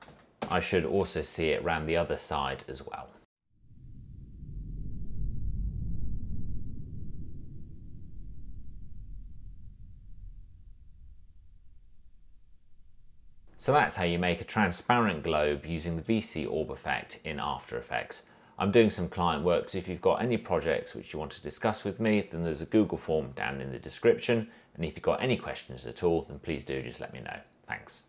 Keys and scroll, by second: 0.0-0.3 typing, 0.6 Return.